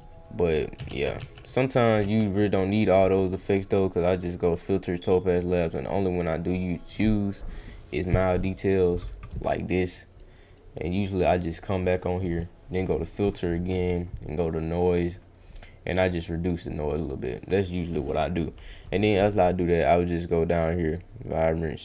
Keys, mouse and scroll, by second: 0.8 ctrl+z, 1.2 ctrl+z, 2.0 ctrl+z, 3.9 click, 6.8 click, 8.8 click, 10.1 click, 10.5 click, 11.2 click, 15.0 click, 16.0 click, 16.5 click, 17.2 click, 17.7 click, 19.3 click, 20.6 click, 21.7 click.